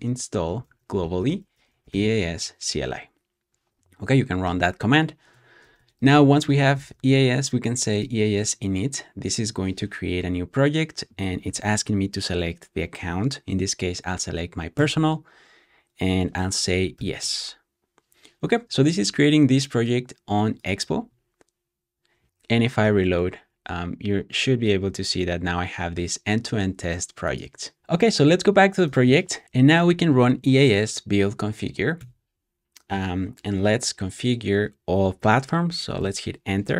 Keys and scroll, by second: 0.0-2.2 typing, 4.3-8.4 typing, 16.7-17.6 typing, 21.5-22.8 typing, 29.4 Up, 29.4 Down, 29.4 BackSpace, 31.9 typing, 35.9 Return.